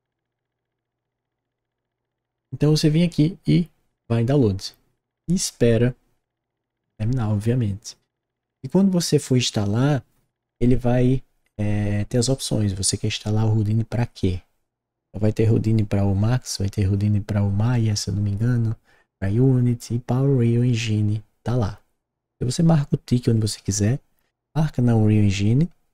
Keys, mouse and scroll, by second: 0.0 click.